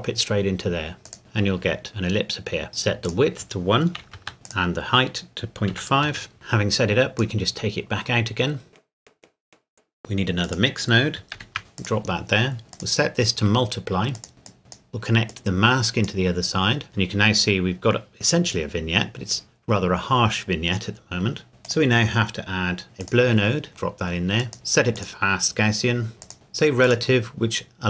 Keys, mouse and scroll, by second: 1.1 click, 4.0 KP_1, 4.2 KP_Enter, 4.5 click, 5.7 KP_Decimal, 6.1 KP_5, 6.3 click, 8.8 click, 11.4 shift+d, 11.8 click, 12.7 click, 14.5 click, 15.3 click, 21.7 click, 26.8 click.